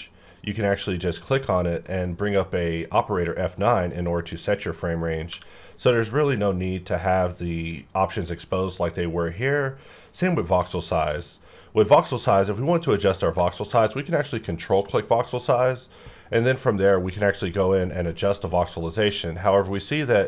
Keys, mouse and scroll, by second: 1.1 F9, 1.8 click, 1.8-5.2 drag, 5.3 q, 14.6 ctrl+click, 19.6-20.2 drag.